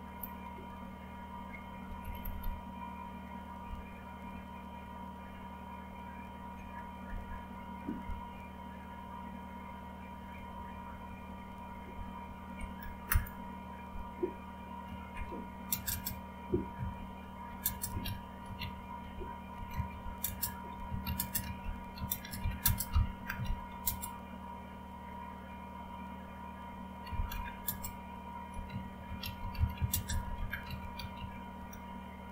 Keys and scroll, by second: 0.5 Down, 1.0 Down, 1.1 Down, 1.3 Down, 2.0 Up, 2.2 Up, 2.3 Up, 4.3-7.6 typing, 8.6-10.2 typing, 11.5-13.1 typing, 15.5-24.2 typing, 27.4-32.3 typing.